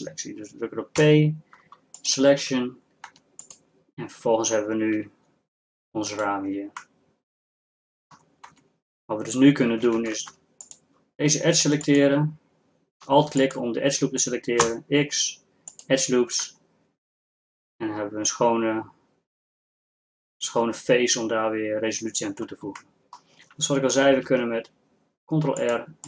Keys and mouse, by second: 1.0 p, 3.4 Tab, 5.2 g, 8.5 Tab, 10.0 ctrl+Tab, 14.7 x, 17.0 middle click, 19.1-22.1 middle drag, 23.0-24.4 drag, 24.4 ctrl+r.